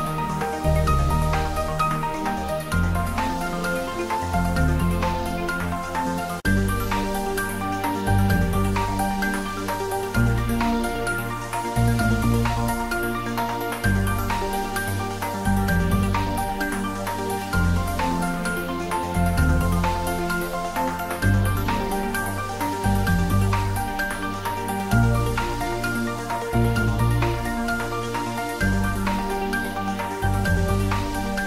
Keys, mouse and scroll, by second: 0.0 a, 0.8 h, 1.4 shift+middle click, 1.7 middle click, 2.8 shift+a, 5.4 click, 6.0 ctrl+middle click, 6.3 ctrl+shift+middle click, 6.7 ctrl+middle click, 13.7 click, 14.2-15.2 typing, 15.8 click, 16.0 middle click, 16.7-18.7 typing, 17.8 click, 18.5 click, 18.7-19.9 middle drag, 19.9 ctrl+middle click, 20.1 shift+middle click, 20.5 Tab, 20.6-22.5 middle drag, 25.0 middle click, 25.1 ctrl+r, 25.4 click, 26.5-27.9 typing, 28.7 click, 29.1 middle click, 29.5 typing, 30.3 click, 31.3 Tab.